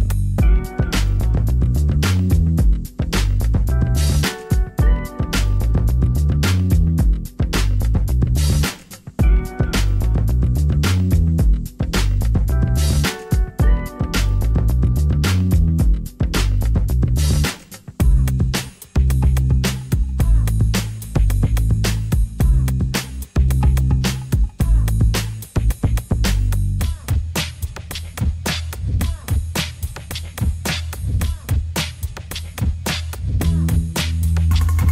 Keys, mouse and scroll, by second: 0.0-5.9 d, 5.3 click, 9.3-9.9 d, 14.5 d, 14.8 d, 18.5 d, 26.4 d, 29.6-33.1 middle drag.